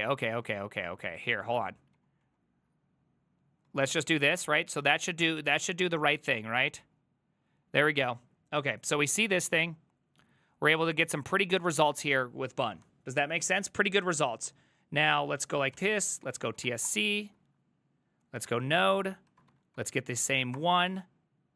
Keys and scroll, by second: 0.3 ctrl+Left, 0.5 ctrl+Left, 0.8 ctrl+Left, 1.3 Left, 1.6 Left, 2.0 ctrl+w, 2.3 ctrl+w, 3.7-4.9 typing, 6.4 Return, 14.1 ctrl+a, 14.5 ctrl+a, 15.3 ctrl+c, 15.8 ctrl+c, 16.0-17.0 typing, 18.2-20.0 typing, 19.0 Return, 20.6 Return, 20.6 ctrl+a.